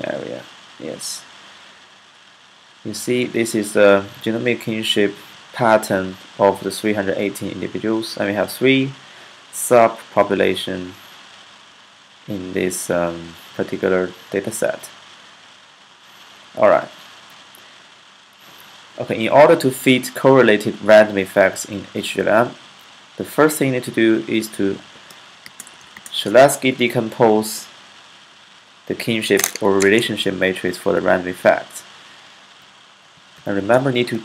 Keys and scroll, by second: 24.7-25.6 typing, 32.4-33.3 typing, 33.8 Left.